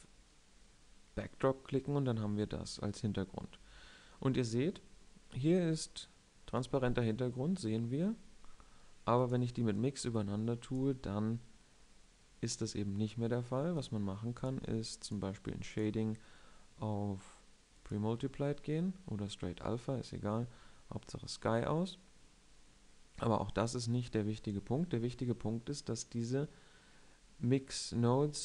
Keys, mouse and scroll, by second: 25.8 click.